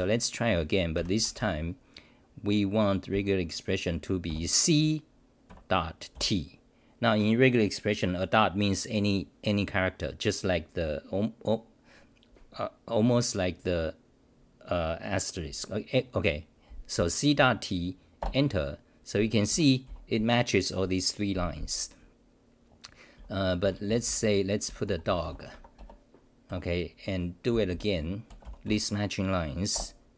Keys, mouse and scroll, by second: 0.9 ctrl+=, 1.1 ctrl+=, 17.4 Home, 18.2 Return, 19.5 w, 19.8 t, 23.4-25.4 typing, 25.5 Home, 25.8 Return, 26.5 ,, 27.5 c, 27.7 c, 28.6 Delete, 29.7 Return.